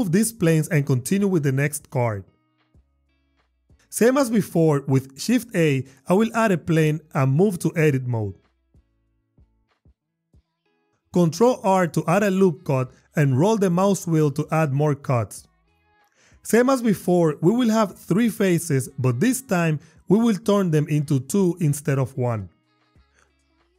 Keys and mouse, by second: 0.8 click, 2.5 g, 2.8 x, 3.3 click, 4.2 shift+a, 6.9 Tab, 8.7 shift+click, 12.3 ctrl+r, 13.7 click, 16.7 ctrl+r, 17.0 click, 17.2 click, 21.0 click.